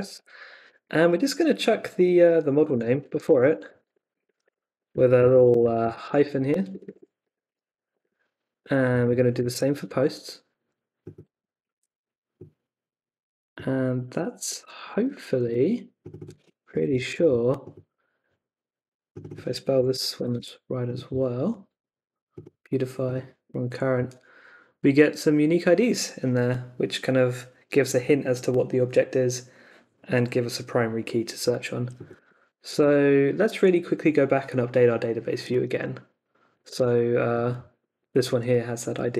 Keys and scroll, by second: 0.1 Left, 2.3-7.9 typing, 4.9 Right, 5.8 Left, 7.2 Right, 8.0 Right, 9.3 shift+0, 11.6 super+c, 14.4 space, 14.9 super+v, 15.4 space, 16.4-17.6 typing, 19.5-20.8 typing, 32.2 super+a, 32.7 super+c, 35.7 super+Tab, 39.0 super+Tab.